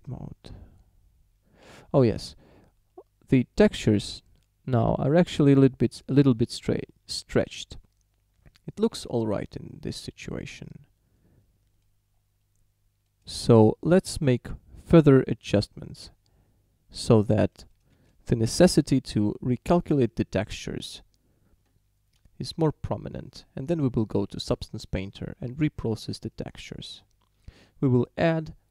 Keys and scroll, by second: 1.7 Tab, 18.1 shift+d.